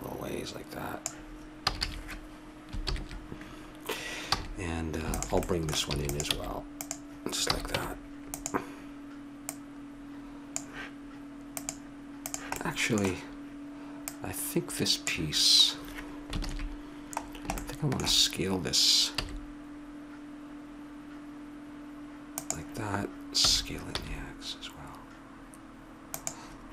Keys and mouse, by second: 1.6 a, 1.8 a, 2.8 ctrl+n, 4.3 a, 5.1 click, 5.5 middle click, 5.9 e, 6.3 s, 6.7 click, 7.5 a, 7.7 Tab, 9.4-10.5 drag, 11.5-12.6 drag, 12.6 middle click, 14.1-15.9 drag, 16.4 ctrl+KP_7, 17.6 middle click, 19.1 s, 23.5 s.